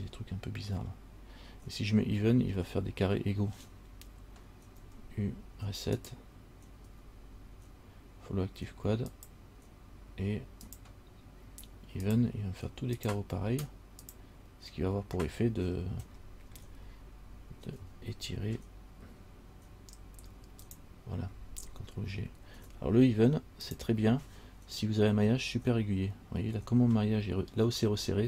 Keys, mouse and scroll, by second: 5.0 u, 7.0 u, 15.7-17.9 scroll down 8, 17.9 s, 22.7 g, 26.8 scroll down 3.